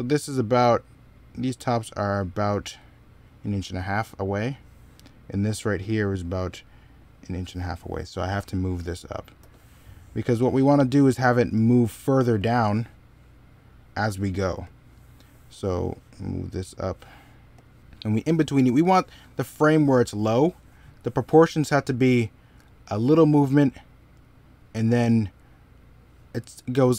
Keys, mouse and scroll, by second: 8.0 middle click, 9.2 s.